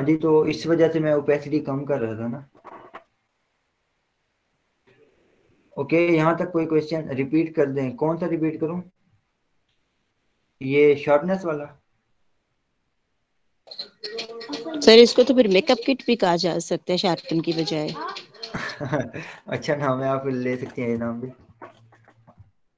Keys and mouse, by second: 18.1-21.2 drag, 21.2 ctrl+o, 22.0 click, 22.5 ctrl+o.